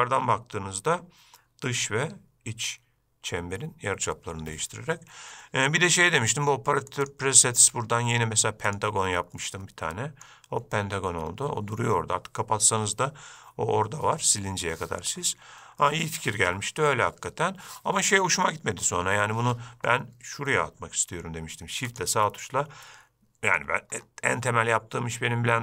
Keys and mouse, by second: 7.2-9.0 drag, 9.6-10.4 middle drag, 22.1 shift+right click, 23.0-23.8 shift+middle drag.